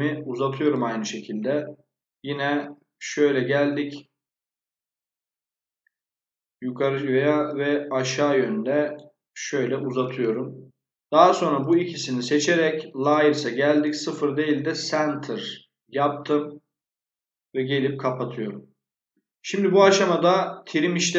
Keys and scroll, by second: 1.2 Escape, 9.7 Escape, 17.2 Escape.